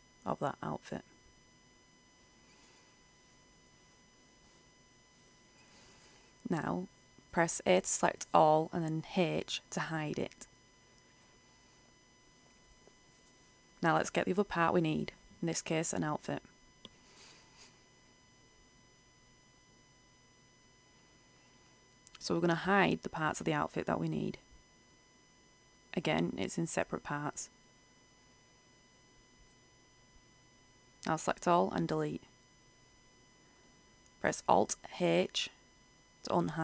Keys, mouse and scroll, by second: 1.6 Delete, 2.0 Return, 2.7-3.5 scroll down 1, 3.5-4.7 scroll up 1, 4.7-8.6 middle drag, 8.6 a, 11.0 h, 12.7-16.3 drag, 23.8 right click, 27.3 h, 28.0 right click, 29.6 h, 30.1-30.6 scroll down 1, 30.6 a, 32.2 Delete, 33.2 Return, 35.6 alt+h.